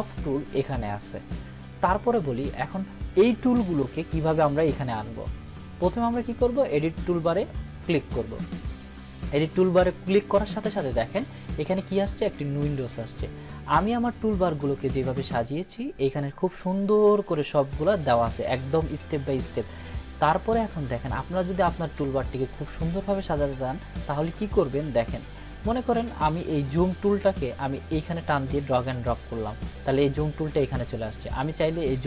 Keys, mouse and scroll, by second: 16.2-18.7 drag, 31.3-32.0 drag.